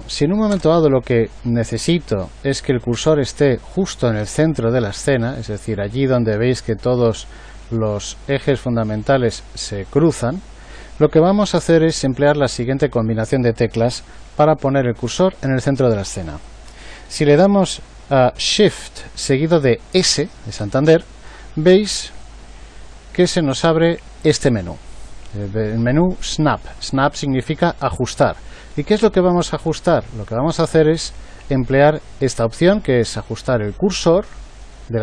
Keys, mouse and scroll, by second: 20.6 shift+s.